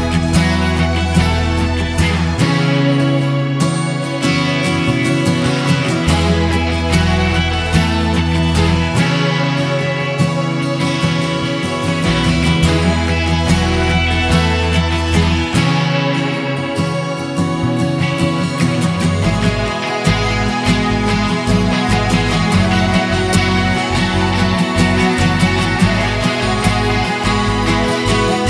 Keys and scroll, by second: 3.7-6.7 typing, 7.2 super+a, 25.4 super+j.